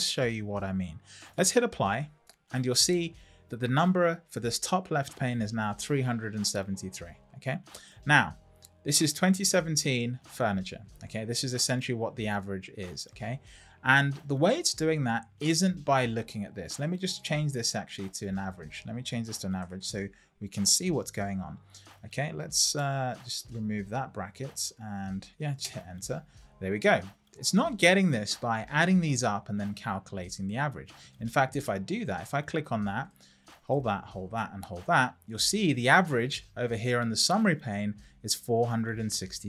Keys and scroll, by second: 19.2-20.3 typing, 21.1 Return, 22.7 Right, 25.6 Return.